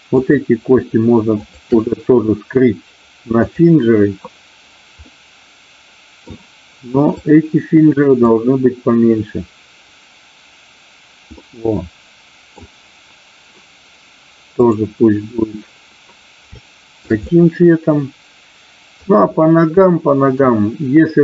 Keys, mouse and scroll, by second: 0.0-1.0 drag, 1.3 shift+click, 3.3 click, 5.0-6.3 middle drag, 7.2-10.3 drag, 11.3-12.5 middle drag, 14.5 click, 16.5 shift+middle click, 17.2-18.9 middle drag, 19.8 middle click.